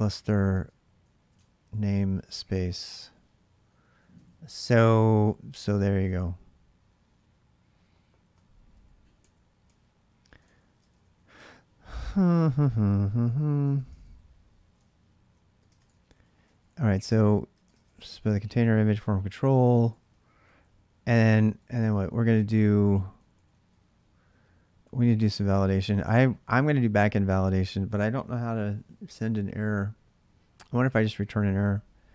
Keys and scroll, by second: 0.0-26.7 typing, 1.1 Return, 10.6 ctrl+[, 10.7 ctrl+j.